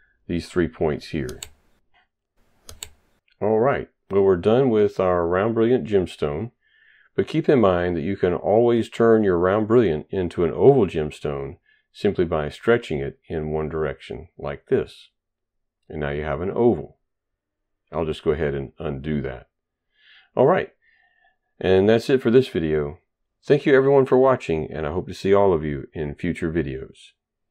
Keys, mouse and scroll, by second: 0.5 Delete, 1.0 right click, 2.0 ctrl+right click, 2.2 ctrl+right click, 2.8 shift+right click, 7.3 shift+right click.